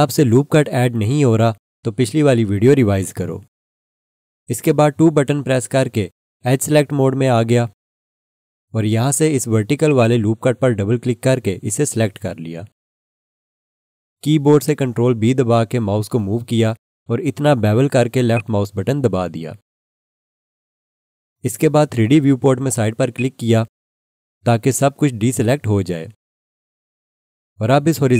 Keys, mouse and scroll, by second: 5.0 2, 9.8 click, 10.0 double click, 15.1 ctrl+b, 18.3 click, 23.1 click, 28.1 click.